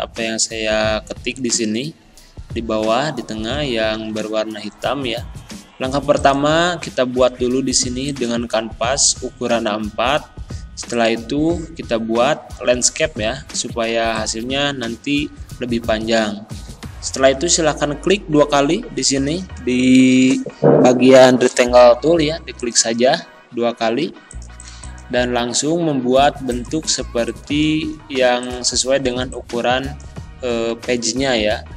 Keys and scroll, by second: 3.7 d, 3.8 s, 28.0 ctrl+z, 29.1 z.